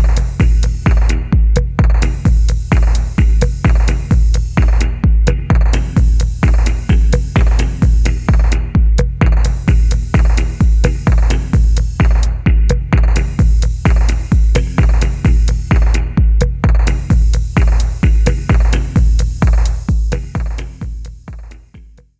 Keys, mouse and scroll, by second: 0.7 alt+click, 1.2 alt+middle click, 2.1 alt+click, 4.4 alt+click, 5.4-5.8 alt+scroll down 2, 5.8 scroll up 1, 5.9-6.5 alt+scroll down 1, 6.5 alt+scroll up 1, 6.5 alt+scroll down 1, 6.6 scroll up 1, 6.8-7.2 scroll down 1, 7.3 alt+click, 7.9 scroll up 1, 8.2 scroll down 1, 8.6-9.3 alt+scroll up 1, 10.9 alt+middle click, 11.5 alt+click, 12.1 alt+middle click.